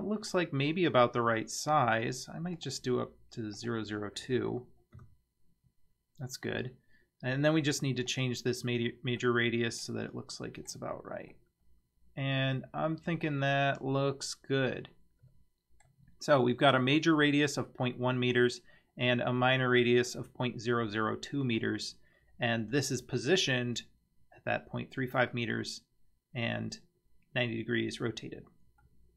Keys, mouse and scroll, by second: 0.6-1.2 scroll up 2, 1.4 scroll down 1, 2.6-3.8 drag, 5.0 click, 8.1 click, 9.2-10.8 middle drag, 11.3-15.5 middle drag, 15.5 click, 28.3 scroll down 2, 28.8-29.1 middle drag.